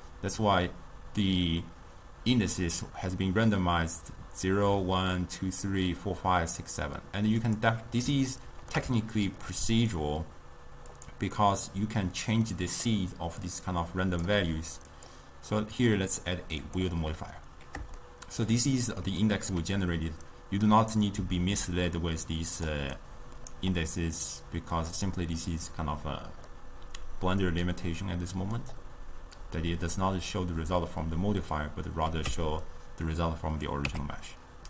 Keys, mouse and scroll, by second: 7.5 click, 8.4-11.0 shift+middle drag, 11.0 click, 12.6-13.6 middle drag, 13.6-18.1 drag, 18.1-21.3 shift+middle drag, 21.3 d, 21.6-22.8 drag, 22.8 d, 22.8 d, 23.1 right click, 23.6 d, 24.3 d, 24.8 click, 26.6-29.6 middle drag, 32.4 Tab, 34.0 Tab.